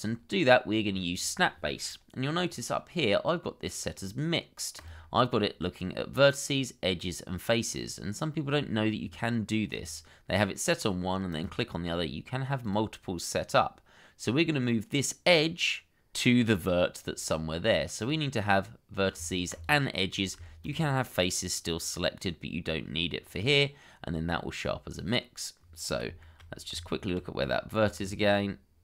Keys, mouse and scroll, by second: 19.5 shift+click, 20.6 shift+click, 25.8 scroll up 1, 26.2 shift+middle click, 26.7 Tab, 27.7 scroll down 1, 28.1 shift+middle click.